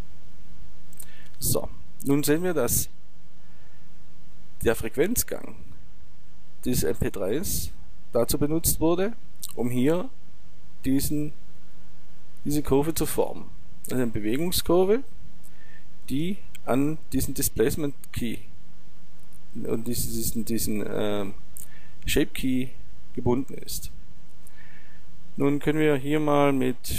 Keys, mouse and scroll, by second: 26.5 click.